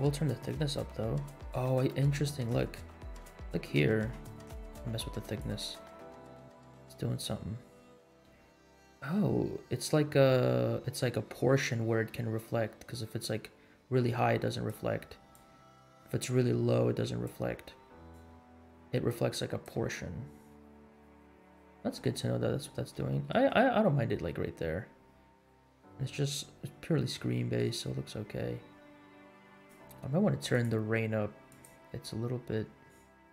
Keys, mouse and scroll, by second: 2.9 scroll up 2, 3.4-4.1 shift+middle drag, 5.3-15.1 drag, 15.3-17.3 drag, 18.1-19.8 drag, 20.1-21.2 scroll down 6, 21.7 shift+middle drag, 22.2 scroll up 2, 22.9 scroll up 1, 23.1 shift+middle drag, 24.2-25.6 scroll down 8, 26.1 scroll down 1, 26.3-27.1 scroll up 3, 27.4 shift+middle drag, 27.8-28.3 scroll up 3, 29.1 scroll down 1, 29.5 click, 30.5 click, 31.5 click.